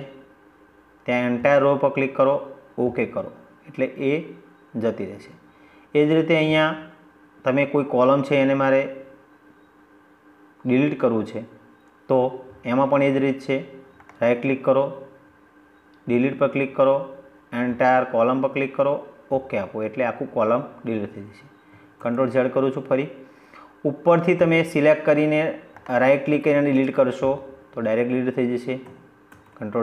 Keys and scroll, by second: 20.8 ctrl+z, 28.2 ctrl+z.